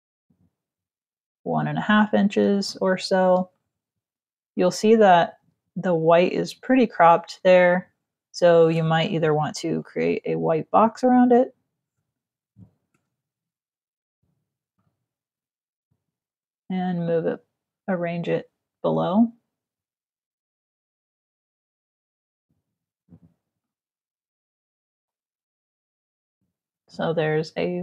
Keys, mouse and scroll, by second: 2.3 space, 2.5 click, 3.5 z, 4.2 click, 5.2 v, 8.9 m, 9.4 click, 13.5 click, 14.3 click, 15.3 click, 16.7 click, 20.6 click, 23.3 click, 25.1 click.